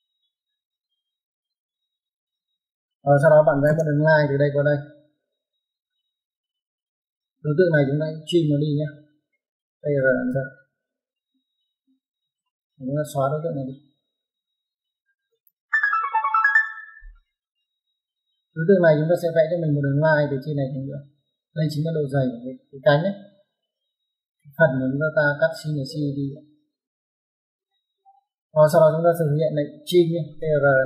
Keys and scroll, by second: 2.3 space, 3.5 l, 3.6 space, 6.5 space, 9.7-10.2 typing, 12.1 space, 15.1 e, 15.2 space, 25.6 space, 27.7 Escape, 30.3-30.8 typing.